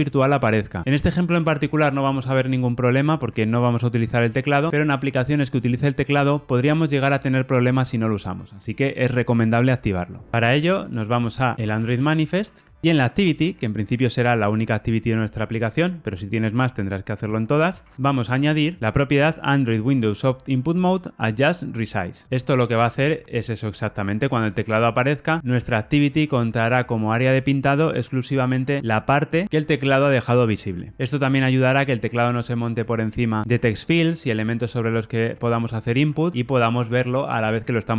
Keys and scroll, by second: 18.8 Tab.